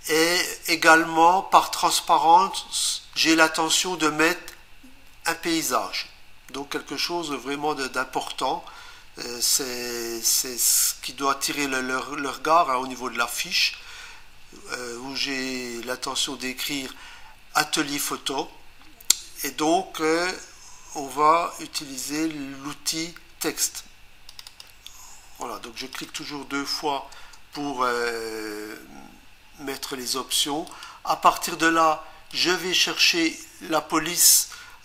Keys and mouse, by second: 24.3 click, 24.5 click, 24.6 double click, 25.8 click, 26.0 click, 26.2 double click, 27.1 Return, 30.7 click, 32.3 click.